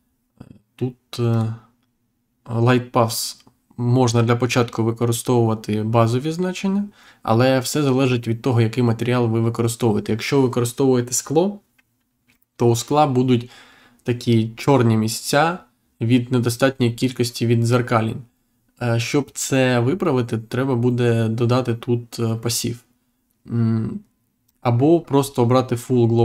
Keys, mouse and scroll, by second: 1.2 click, 24.4 click.